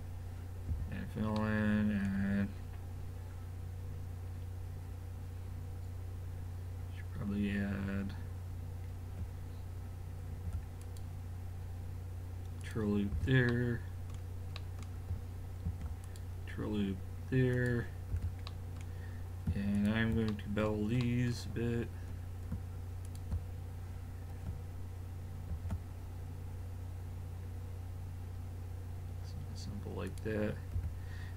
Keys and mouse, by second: 0.7 a, 1.4-2.6 middle drag, 10.3 ctrl+r, 13.2 a, 15.7 ctrl+r, 18.2 a, 19.8 click, 21.7-23.1 middle drag, 23.1 click, 25.5 ctrl+b, 30.8 a.